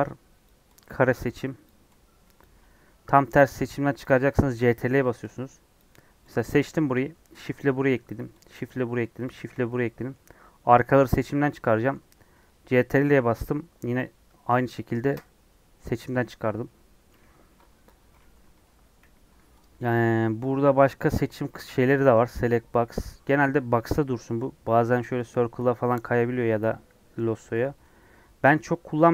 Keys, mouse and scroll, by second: 0.4 click, 1.1 click, 1.6 click, 2.4 click, 4.0 ctrl+click, 4.9 ctrl+click, 5.7 click, 8.5 shift+click, 9.6 scroll down 1, 9.6-15.1 middle drag, 15.8-18.5 middle drag, 18.5 KP_3, 19.6 click, 27.6 click.